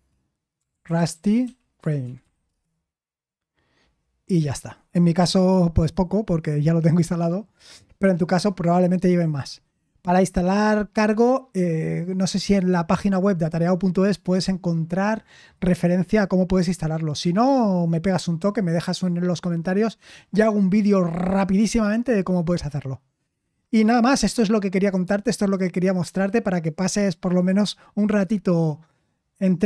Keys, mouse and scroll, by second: 0.0-2.7 typing.